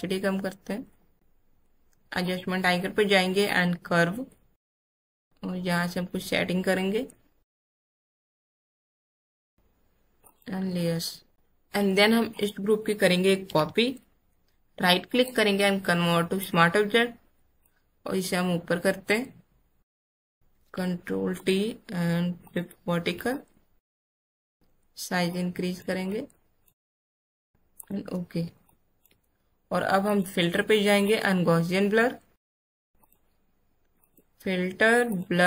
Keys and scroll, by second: 13.4 ctrl+j, 20.5 ctrl+t, 28.6 space.